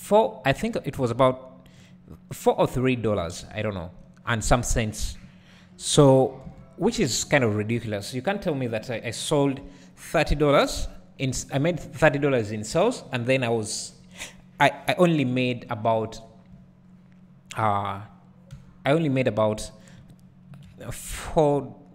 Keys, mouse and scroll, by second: 0.5 Tab, 3.6 `, 4.9 scroll down 1, 5.2 `, 6.0-7.0 scroll up 1, 7.0 `, 17.1-18.0 scroll up 1, 18.0 click, 18.5 Tab, 19.9 alt+click, 20.5 KP_Decimal.